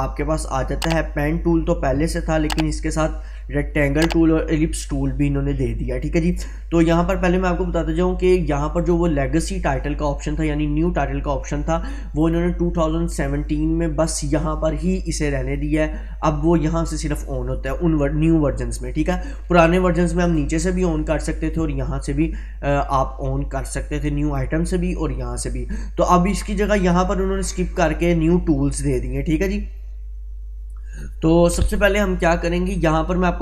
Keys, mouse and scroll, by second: 6.2 click, 7.3 click, 12.2 click, 29.2 click.